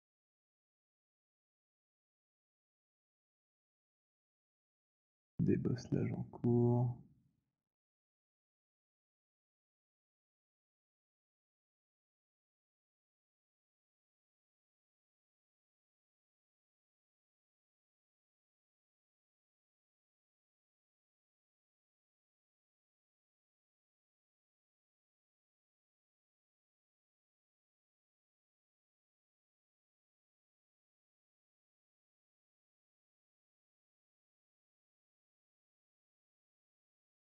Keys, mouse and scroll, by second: 0.0 b, 0.2 click, 0.2 b, 3.8 click, 4.8 click, 8.2 click, 10.5 alt+click, 11.3-13.0 typing, 13.0 click, 15.4 click, 16.8 click, 19.3 click, 20.3 alt+click, 21.7 click, 22.5 click, 24.6 click, 25.4 click, 28.9 click, 31.4 click, 34.8 click, 35.8 alt+click.